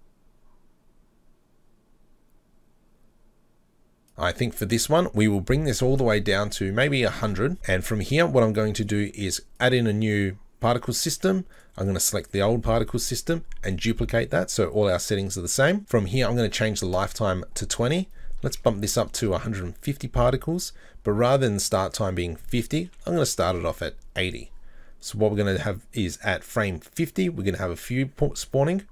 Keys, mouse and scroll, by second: 5.5-7.9 drag, 7.2 KP_0, 8.9 click, 9.6-11.7 drag, 13.7-15.8 drag, 15.9-23.6 drag, 25.4 click.